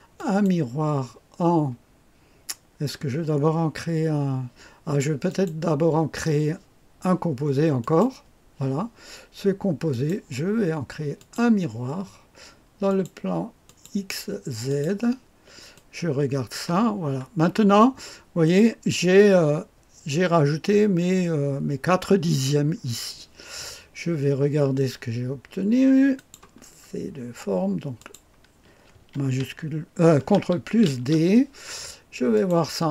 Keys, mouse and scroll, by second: 0.1 click, 5.2 click, 7.7 click, 9.8 click, 11.1 click, 12.8 click, 13.6 click, 14.6 click, 15.7 click, 16.9-18.4 scroll up 2, 18.4 click, 19.1-19.8 scroll down 1, 22.3-26.1 scroll down 2, 26.1 click, 26.5-27.9 scroll down 2, 27.9 click, 30.8 ctrl+d, 32.3 click.